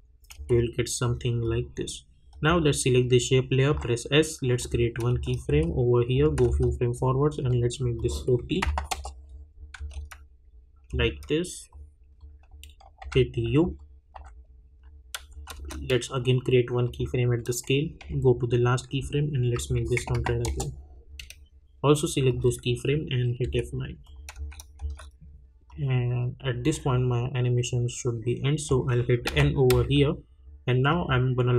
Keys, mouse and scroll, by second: 0.5 space, 1.0 click, 3.7 s, 4.6 click, 5.1 space, 7.9 click, 8.9 Return, 9.7 space, 11.7 click.